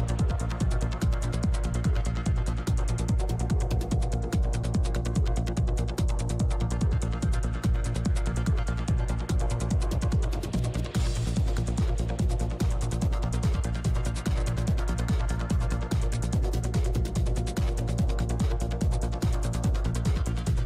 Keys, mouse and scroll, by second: 0.3 click, 1.8 click, 1.8 i, 1.8 g, 2.6 ctrl+z, 3.2 i, 3.2 f, 3.6-5.1 drag, 3.6 middle click, 4.6 middle click, 5.1 g, 5.1 f, 5.7-8.4 drag, 5.8 f, 7.2 f, 7.3-8.5 middle drag, 12.7 shift+c, 12.7 f, 13.8 f, 13.8 i, 14.0 click, 14.8 shift+f, 15.1-18.7 drag, 17.1 f, 18.2-20.6 middle drag, 20.2 shift+c, 20.2 shift+f.